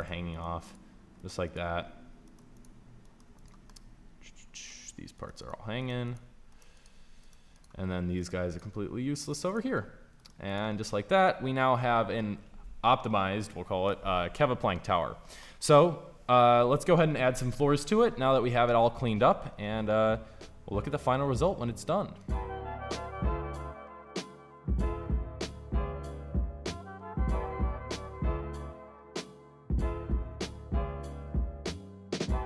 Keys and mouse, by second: 0.4 Delete, 1.3 Delete, 2.3 Delete, 3.1 Delete, 5.2 Delete, 5.9 Delete, 6.6 Delete, 7.4 Delete, 8.3 Delete, 9.3 Delete, 10.2 Delete, 15.7 middle click, 20.5-22.1 middle drag, 22.7 b, 23.2 shift+d, 24.5 KP_1, 24.6 KP_5, 25.2 g, 25.9 KP_5, 27.5-32.2 typing, 30.3 click, 31.0 Tab.